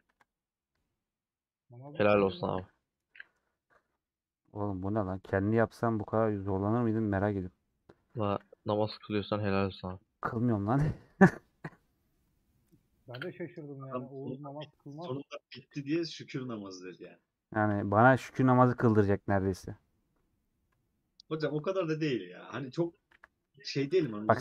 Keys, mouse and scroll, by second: 0.4-4.0 middle drag, 4.0 click, 4.1 middle click, 4.3-5.0 scroll up 2, 5.0-7.2 middle drag, 7.2 click, 7.3 middle click, 8.3 a, 9.8 middle click, 10.1-15.8 right drag, 15.8-17.5 drag, 17.5 ctrl+a.